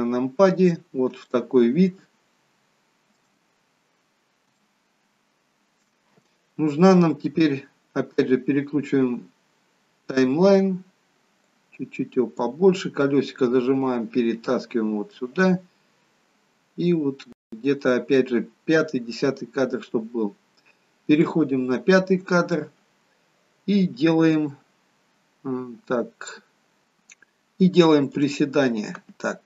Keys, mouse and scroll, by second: 1.5 shift+middle click, 1.5 scroll down 2, 3.9-4.5 scroll up 2, 4.7 shift+middle click, 7.7-9.5 scroll up 8, 9.5-11.7 scroll up 1, 11.7 click, 13.2 middle click, 16.1-17.8 scroll up 2, 17.8 middle click, 17.8-18.9 scroll up 1, 21.3 click, 26.4-26.8 scroll down 1, 26.8-28.1 scroll up 1, 28.1 click.